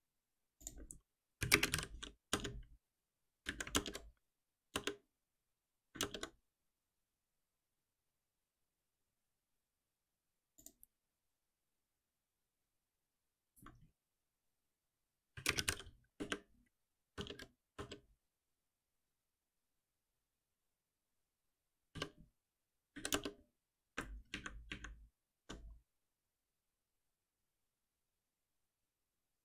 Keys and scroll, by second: 2.3 Return, 3.7 alt+Return, 16.1 Return, 21.9 F6, 23.8 ctrl+b, 24.3 ctrl+shift+Up.